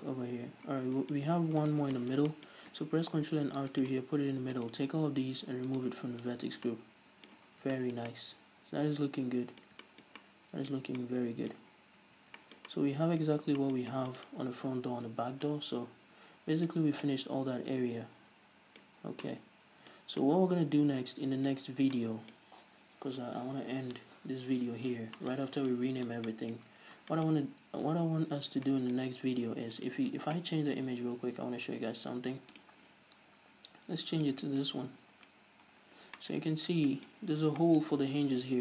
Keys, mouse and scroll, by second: 0.0 Tab, 0.0 middle click, 0.4-1.1 scroll up 2, 1.1 Tab, 1.1-2.1 middle drag, 1.2 scroll down 1, 1.7-2.1 scroll up 1, 2.1 right click, 2.3 Tab, 2.5-4.3 shift+middle drag, 3.4 ctrl+r, 4.3 click, 5.0 alt+right click, 6.2 click, 6.8 middle click, 6.8 scroll down 2, 7.0 Tab, 7.1-8.2 middle drag, 8.0 scroll down 2, 10.3 shift+middle click, 10.7 middle click, 11.2 scroll up 1, 11.5 middle click, 12.2 scroll down 1, 12.4 a, 12.9-33.0 shift+middle drag, 13.9 scroll down 1, 17.2-17.5 scroll up 1, 19.5 scroll down 1, 22.1-22.4 scroll up 2, 29.9 scroll down 2, 31.4-32.2 scroll down 2, 32.2-33.0 scroll down 1, 33.0 click, 35.7-38.6 drag.